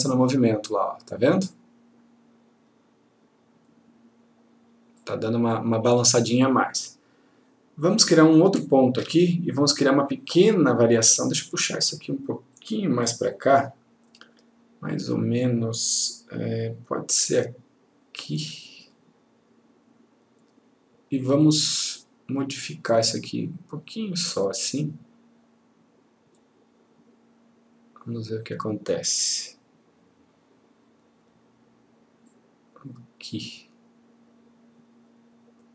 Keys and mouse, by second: 5.1 click, 8.7 ctrl+click, 12.7-21.4 click, 23.2-31.5 click.